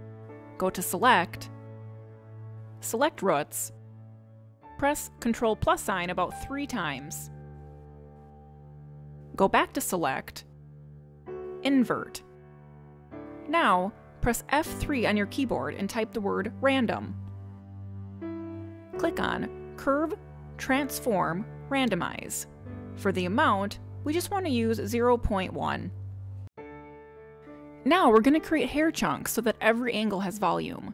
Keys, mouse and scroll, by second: 1.6 click, 6.1 ctrl+KP_Add, 6.4 ctrl+KP_Add, 6.8 ctrl+KP_Add, 10.1 click, 15.0 F3.